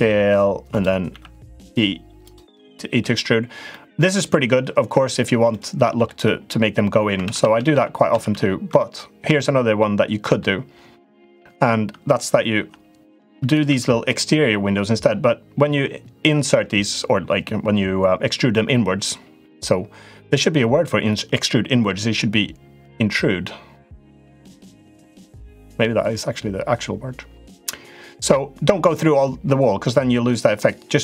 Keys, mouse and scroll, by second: 0.8 e, 2.4 middle click, 3.4 middle click, 5.2 middle click, 7.0 ctrl+z, 7.2 ctrl+z, 7.3 ctrl+z, 7.5 ctrl+z, 7.9 ctrl+z, 8.1 ctrl+z, 8.5 middle click, 9.5 middle click, 13.2 i, 13.4 e.